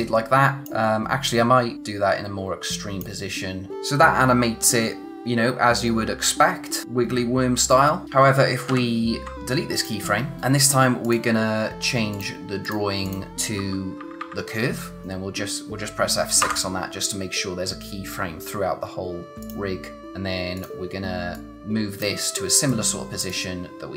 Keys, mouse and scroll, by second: 8.7 ctrl+z, 9.7 click, 13.5-14.2 typing, 15.0 click, 16.4 F6, 19.4 click, 20.5 click.